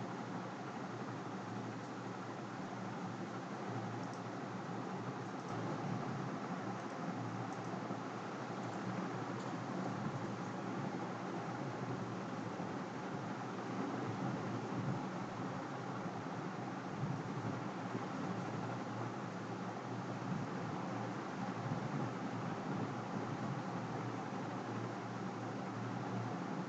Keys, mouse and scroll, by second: 4.1-5.3 drag, 5.8-7.3 drag, 7.6-16.0 drag.